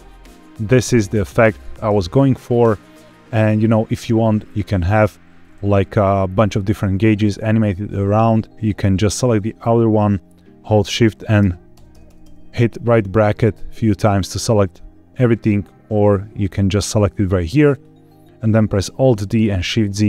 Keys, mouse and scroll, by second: 0.0-0.5 scroll down 1, 0.5 scroll up 2, 1.4-2.1 scroll down 1, 3.9 space, 4.3 click, 11.3-12.2 typing, 16.4 click, 17.6 click, 19.2 alt+d, 19.6 shift+z.